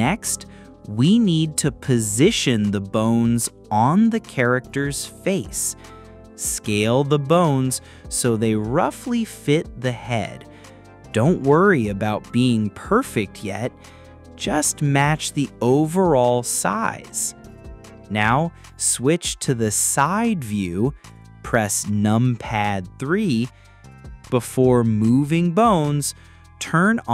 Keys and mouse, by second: 0.1 click, 2.8 click, 4.8 s, 5.2 click, 5.5 s, 5.9 drag, 6.2 g, 6.3 z, 7.3 click, 7.9 s, 9.1 click, 9.5 g, 9.5 z, 10.9 click, 12.5 click, 13.2 g, 14.1 x, 15.3 y, 15.9 click, 17.7 click, 18.3 click, 19.9 drag, 21.6 click, 22.0 click, 25.2 h, 25.8 click.